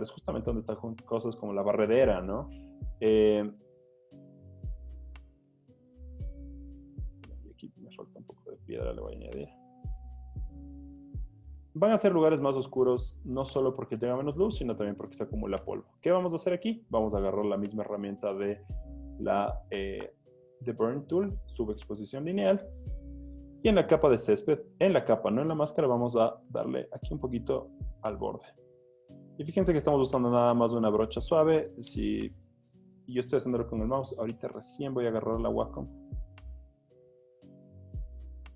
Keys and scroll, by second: 0.3 z, 1.9 i, 12.7 alt+BackSpace, 13.5 super+d, 13.8 z, 15.1 z, 16.6 z, 22.5 z, 25.6 o, 37.2 z.